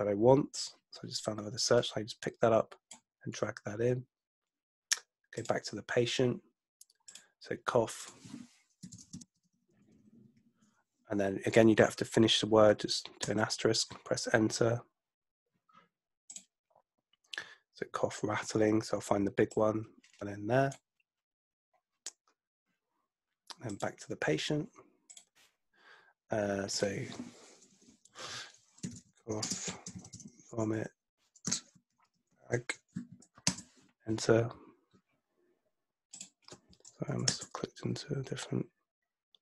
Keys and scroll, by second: 8.6-10.8 typing, 13.3 Return, 28.6-32.9 typing, 33.5 Return, 37.3 Return.